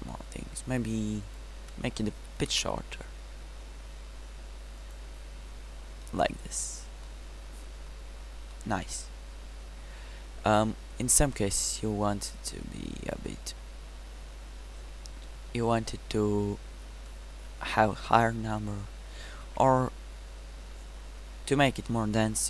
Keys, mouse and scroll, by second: 1.7-6.3 middle drag, 20.0 Tab.